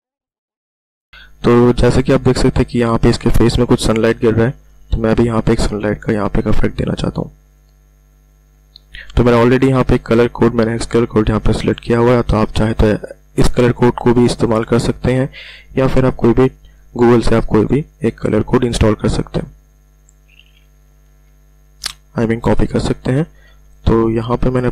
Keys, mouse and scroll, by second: 0.0 click, 1.8-2.2 ctrl+alt+scroll up 1, 3.5 ctrl+alt+scroll down 1, 7.5 click, 19.2 click, 20.8 ], 21.0 ], 21.2 ], 23.2 ], 23.4 ].